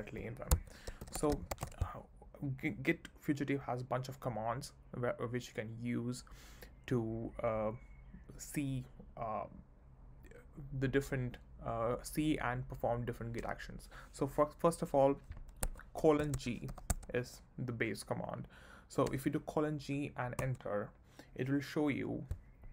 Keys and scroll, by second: 0.5 Escape, 0.7-2.0 typing, 15.6 Escape, 20.5 Return.